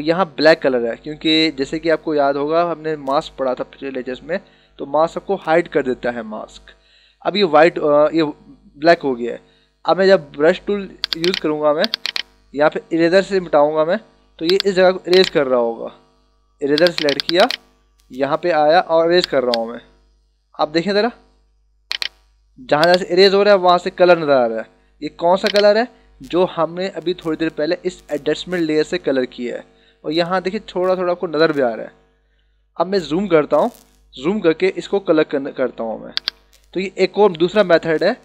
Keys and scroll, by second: 32.7 ctrl+=, 34.5 ctrl+=, 35.7 ].